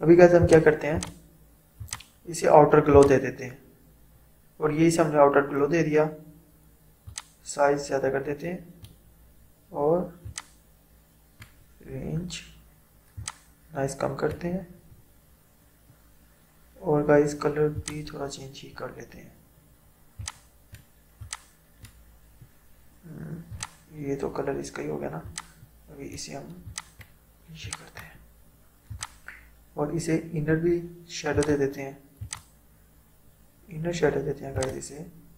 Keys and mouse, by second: 0.5 click, 7.1-10.3 drag, 10.4-17.8 drag, 20.2-29.0 drag, 31.4 click, 34.6-35.3 drag.